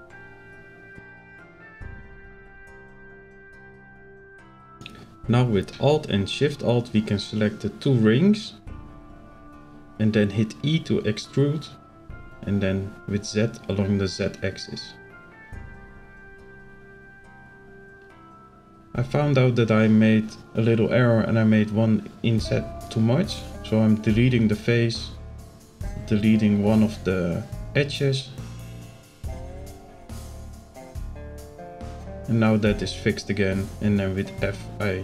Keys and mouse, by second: 1.3 middle click, 2.4 s, 3.5 i, 5.7 alt+click, 9.0 alt+shift+click, 11.0 e, 14.5 click, 16.4 click, 17.3 click, 20.9 Delete, 23.6 click, 24.2 alt+click, 26.3 ctrl+z, 26.6 ctrl+z, 27.0 ctrl+z, 28.3 click, 29.3 click, 30.0 Delete, 32.4 alt+click, 33.4 f.